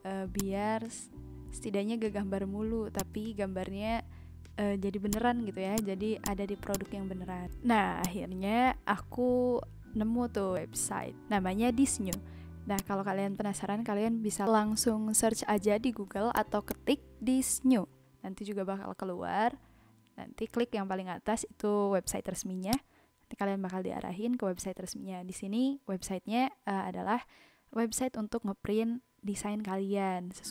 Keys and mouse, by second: 2.0 ctrl+z, 2.6 ctrl+z, 2.9 click, 3.4 ctrl+z, 5.0 click, 5.7 click, 7.6 ctrl+z, 8.0 click, 12.0 click, 12.8 click, 16.3 click, 16.5 ctrl+z, 16.7 click, 22.7 click, 25.5 click.